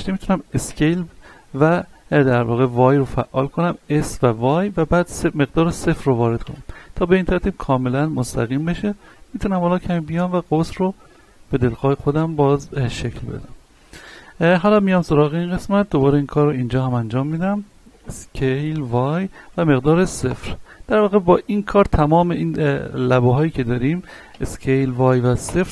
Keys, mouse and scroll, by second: 0.7 s, 8.1 y, 8.2 shift+middle click, 9.1-11.2 drag, 11.2 scroll down 1, 11.6 shift+middle click, 12.6-12.9 scroll down 1, 12.9 middle click, 13.8 scroll down 1, 14.8 alt+right click, 17.2 scroll up 1, 18.4 typing, 21.4 typing, 21.8 right click, 24.3-24.9 typing.